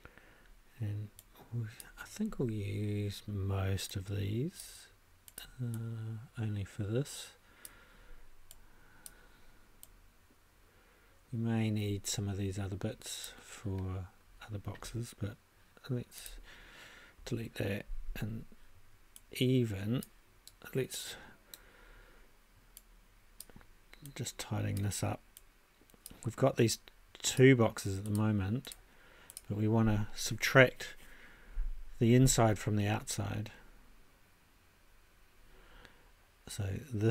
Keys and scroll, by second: 17.2 BackSpace.